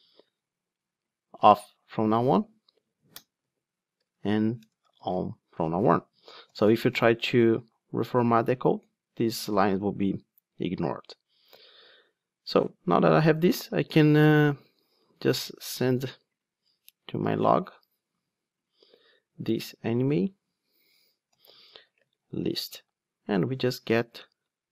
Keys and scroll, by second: 3.4 super+v, 6.3 alt+super+l, 14.6 super+c.